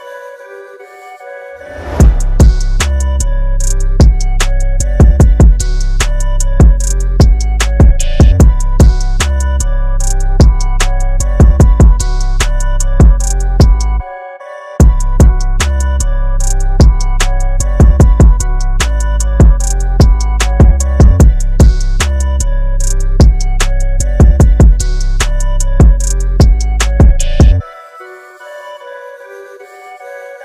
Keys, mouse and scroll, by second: 0.1 shift+click, 1.1 click, 4.2 space, 4.3 click, 4.5 space, 5.6 click, 8.7 click, 12.1 KP_9, 12.3 KP_5, 13.1 Tab, 13.7 KP_9, 13.8 KP_5, 15.7 click, 17.0-17.8 scroll up 1, 17.8 click, 18.2-20.9 scroll up 1, 21.3-25.1 scroll down 1, 26.6-29.4 scroll up 1, 30.3-30.4 scroll up 1.